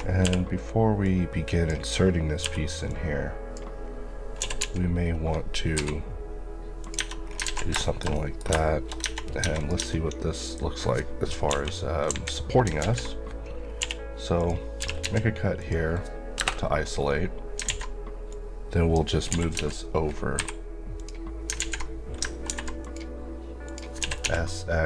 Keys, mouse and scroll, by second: 1.0 click, 2.4 b, 2.9 click, 4.4 typing, 5.7 y, 6.8 click, 7.0 Tab, 7.2 scroll down 2, 7.5 alt+z, 7.9 shift+middle click, 9.0 Tab, 9.5 click, 9.8 Tab, 11.5 KP_1, 12.8 alt+z, 13.7 scroll down 1, 13.8-15.1 typing, 14.4 click, 15.6 click, 16.4 KP_Enter, 17.0 scroll up 1, 17.7 alt+a, 18.3 click, 19.5 typing, 21.0 click, 21.6 alt+z, 22.5 ctrl+r, 22.8 click, 24.0-24.8 typing.